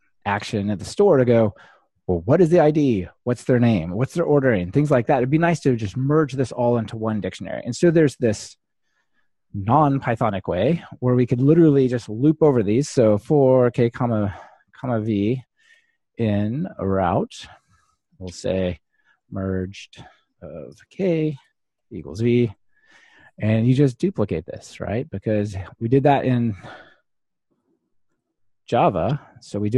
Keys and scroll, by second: 15.5-16.2 typing, 17.3-18.1 typing, 24.3 super+d, 26.2 ctrl+alt+shift+Left.